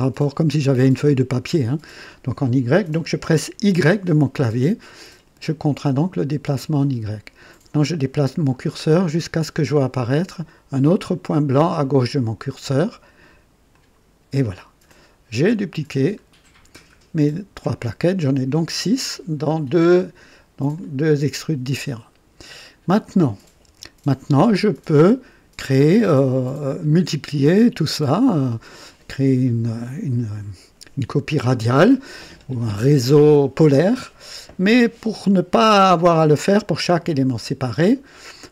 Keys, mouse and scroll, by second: 3.6 y, 13.7 click, 14.9 click, 16.2-16.5 scroll down 1, 16.8 right click, 19.5 click, 20.7 click, 21.8-22.2 scroll down 1, 22.9 click, 23.6 KP_2, 24.2-24.5 scroll down 1, 24.7 right click, 26.3 right click.